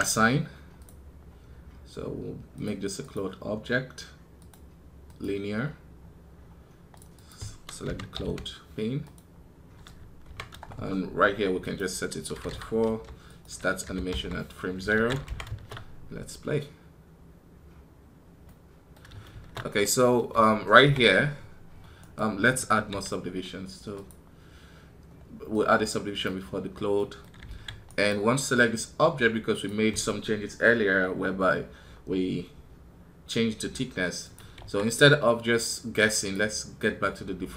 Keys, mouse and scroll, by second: 21.9 right click, 27.7 right click.